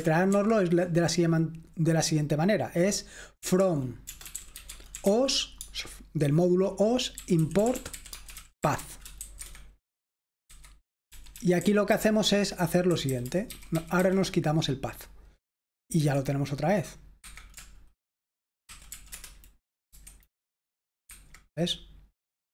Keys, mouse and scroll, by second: 0.3 typing, 3.4-5.6 typing, 7.0-14.0 typing, 16.0 F5, 17.4 Escape, 18.7-19.1 typing, 19.1 Return, 19.9 F5, 21.1 Escape.